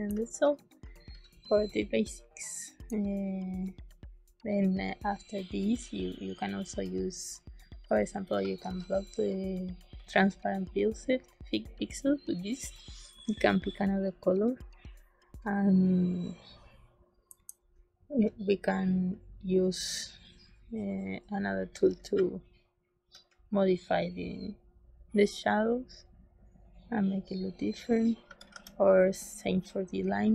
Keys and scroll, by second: 0.0 space, 8.5 shift+a, 17.2 c, 21.6 z, 28.2 z, 28.4 z, 30.0 z.